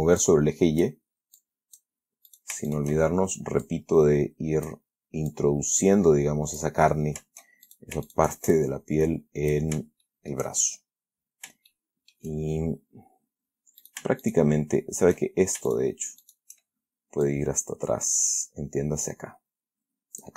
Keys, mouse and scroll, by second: 0.5 click, 1.7 click, 2.6 shift+right click, 3.0 shift+right click, 4.0-5.2 drag, 5.6-7.1 drag, 8.0 shift+right click, 8.4 shift+right click, 8.8-10.0 shift+drag, 10.4 shift+middle click, 10.4 shift+scroll down 1, 11.1 shift+scroll up 1, 12.0 shift+middle click, 14.1 shift+right click, 14.5 shift+right click, 16.0 shift+right click, 16.5 shift+right click, 17.6-20.3 drag.